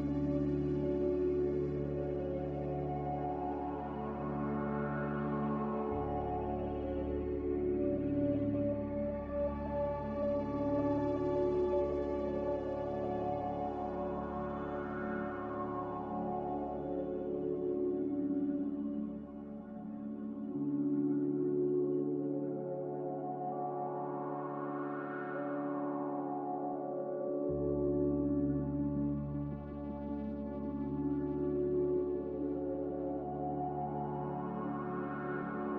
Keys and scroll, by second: 0.8 Tab, 2.2-3.0 typing, 8.0 n, 14.3 a, 20.7-21.8 typing, 29.8 5, 30.4 Return, 31.9 1, 32.1 Return.